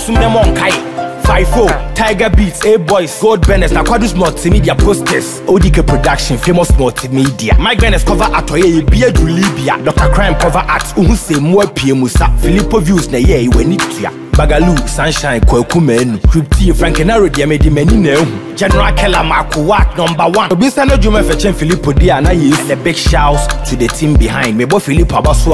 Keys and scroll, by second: 16.2 ctrl+-.